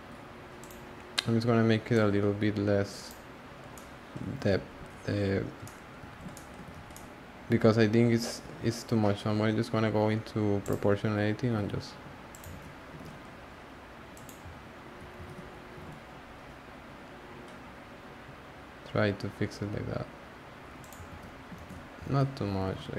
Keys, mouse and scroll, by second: 0.6 click, 1.9 click, 3.7-4.3 middle drag, 4.3 alt+z, 5.6-6.7 middle drag, 6.7 alt+z, 6.9-10.6 middle drag, 10.6 click, 11.5 g, 12.5 z, 12.9 g, 15.2 z, 15.7 g, 21.1 z, 22.0 z, 22.6 g.